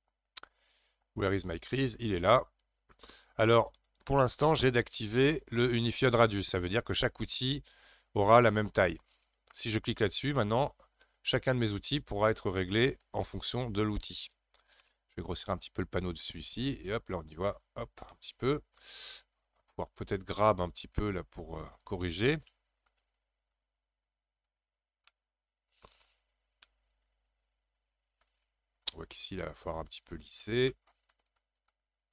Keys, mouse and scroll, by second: 1.5-3.9 drag, 3.9-16.1 right drag, 16.1-18.1 drag, 18.1-20.8 middle drag, 20.8 click, 21.2-22.5 scroll up 3, 22.5 f, 23.5-25.1 drag, 25.1-28.8 middle drag, 28.8-30.7 shift+drag, 30.7 middle click, 31.4-32.1 shift+drag.